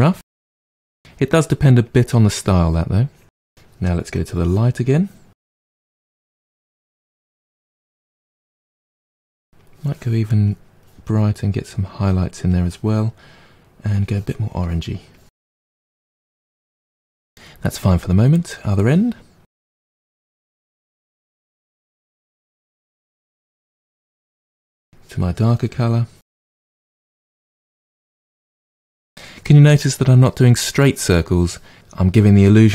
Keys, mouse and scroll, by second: 3.2 middle click, 4.1 click, 4.9-9.7 drag, 10.4-16.5 drag, 16.5-18.5 middle drag, 18.7-19.7 middle drag, 19.7-24.9 drag, 26.0-31.7 drag.